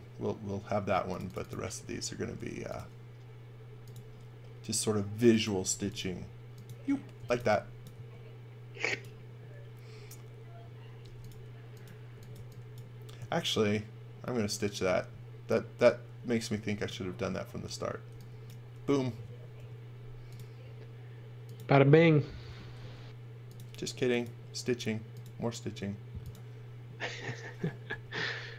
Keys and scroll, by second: 0.9 space, 2.1 a, 5.7 b, 6.9-7.9 typing, 11.0 b, 12.1-12.8 typing, 16.1 e, 17.3 space, 18.1 e, 19.5 l, 22.8 l, 27.9 l.